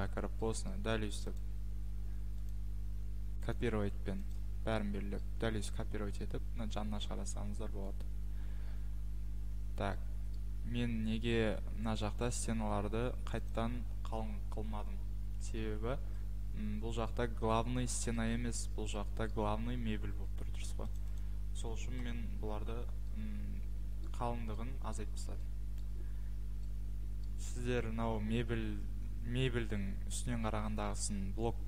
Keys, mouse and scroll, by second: 0.0 click, 0.7-1.4 scroll, 1.4 click, 2.5-2.8 scroll, 3.7 click, 4.3 click, 4.7-5.4 scroll, 5.2 click, 8.0 Escape, 8.4 middle click, 8.9 middle click, 9.4 middle click, 10.1 middle click, 10.3 middle click, 11.8 middle click, 12.1-12.9 scroll, 13.5 click, 15.6 Escape, 16.8-17.8 scroll, 18.2-18.7 scroll, 20.0 scroll, 21.0 click, 21.2 click, 22.0 Delete, 23.1 scroll, 23.8-24.8 scroll, 24.9 scroll, 25.8 click, 27.2 click.